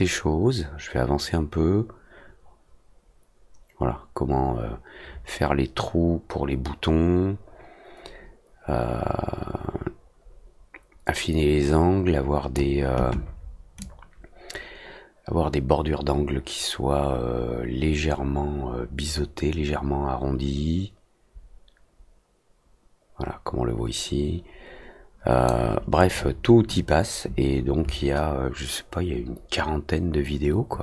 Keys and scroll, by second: 0.5 w, 1.6 ctrl+z, 2.6 F3, 5.6 ctrl+z, 7.8 j, 9.8 F4, 10.7 Tab, 11.1 ctrl+z, 12.1 ctrl+z, 15.7 r, 25.1 Return.